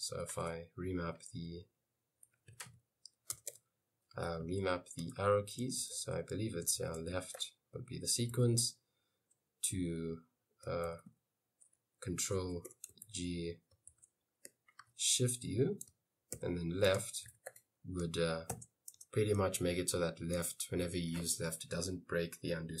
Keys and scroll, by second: 0.2-8.7 typing, 10.7-14.9 typing, 16.2-18.6 typing, 19.0 Return, 20.5 j, 20.8 k.